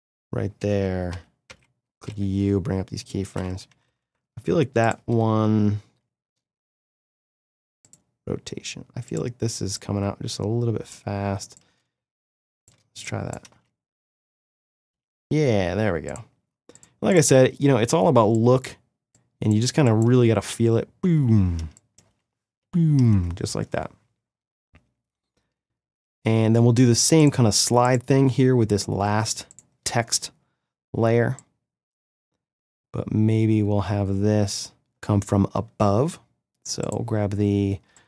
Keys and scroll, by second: 1.5 u, 3.7 =, 13.5 space, 20.1 space, 25.9 space, 37.8 space.